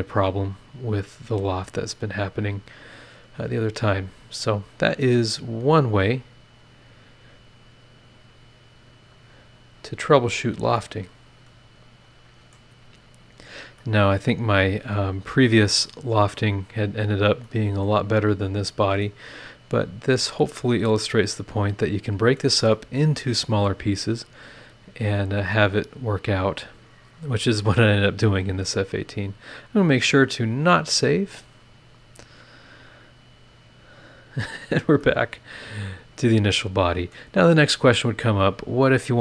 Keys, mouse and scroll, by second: 0.1 click, 1.9 click, 2.6 scroll up 1, 2.9 scroll down 1, 3.4-3.9 scroll up 1, 4.1-5.2 scroll up 3, 5.3-6.0 scroll up 2, 6.6 click, 8.1 click, 8.7-10.2 scroll down 2, 10.4-10.8 scroll up 4, 10.8-12.7 drag, 10.8-12.7 right drag, 12.7 scroll down 2, 13.1 scroll up 2, 13.8-16.5 middle drag, 13.8-16.5 drag, 17.4-19.2 middle drag, 17.5-19.2 drag, 19.5 scroll down 1, 19.9 scroll up 1, 20.4-22.5 middle drag, 20.5-22.5 drag, 22.7-23.8 middle drag, 24.0 scroll down 2, 25.0 click, 25.8 scroll down 2, 29.0 click, 31.4 click, 33.2 click, 34.0 scroll down 1, 34.6-35.3 scroll up 2, 35.0 click.